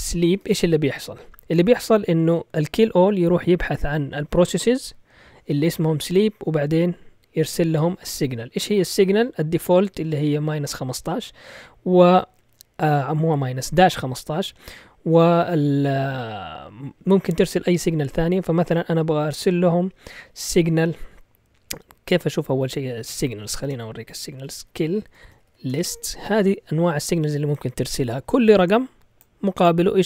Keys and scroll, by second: 0.0-0.9 typing, 8.8 Left, 8.9 Left, 9.1 Left, 9.2 Left, 21.8 Right, 21.9 Right, 22.0 Right, 22.1 Right, 22.4-26.0 typing.